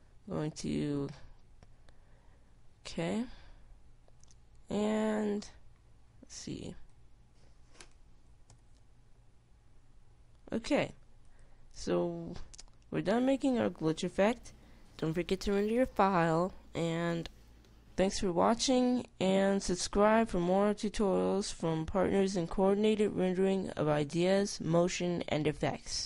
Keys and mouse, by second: 5.2 middle click, 8.1-9.2 drag, 9.9 alt+a, 16.3 alt+a.